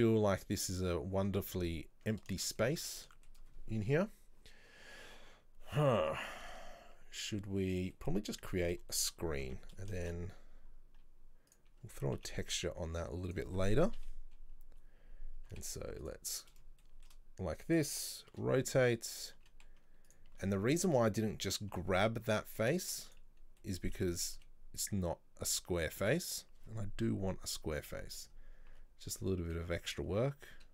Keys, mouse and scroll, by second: 1.0 scroll down 1, 2.4-3.6 shift+middle drag, 3.6 scroll up 2, 6.3-8.2 middle drag, 8.2 scroll down 2, 8.6 middle click, 9.3 scroll down 1, 9.5 Tab, 9.8 middle click, 10.1 shift+a, 11.9 scroll up 1, 12.0 Tab, 14.0 KP_3, 15.6 g, 16.5 scroll up 1, 16.9-18.4 shift+middle drag, 18.4 r, 23.7 middle click, 24.0-24.5 scroll down 2, 24.5 s, 27.1 KP_3, 28.3-28.8 scroll up 1, 28.8 g.